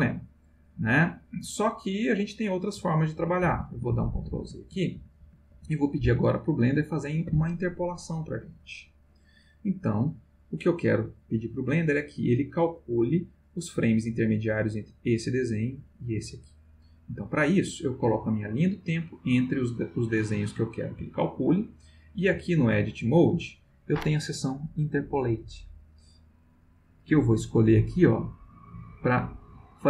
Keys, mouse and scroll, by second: 3.1 ctrl+z, 9.9-12.2 drag, 17.1-19.4 drag, 27.1 click.